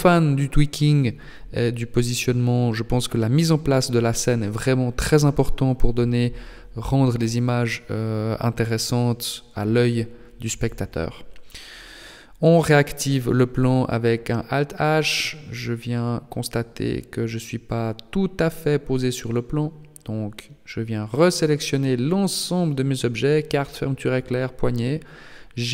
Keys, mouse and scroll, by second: 3.9 r, 5.6 g, 11.8 alt+h, 12.7 right click, 13.3 KP_1, 14.0-14.9 scroll up 2, 14.9-15.3 scroll up 5, 15.7 scroll up 1, 16.8-18.0 scroll down 6, 18.0 shift+middle click, 18.0 scroll down 2, 19.3 h, 20.3 b, 22.0 scroll up 6, 22.8-23.6 scroll up 1, 23.6 g.